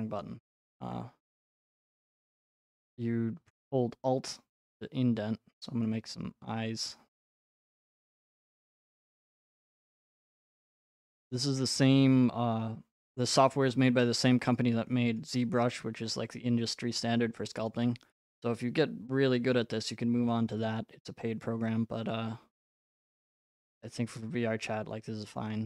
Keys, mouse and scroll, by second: 5.8 alt+click, 7.2 right click, 9.0 click, 10.4 right click, 14.3 click, 15.2 right click, 17.7 click, 19.5 right click, 20.3 right click, 22.1 click, 22.7 click, 25.4 click.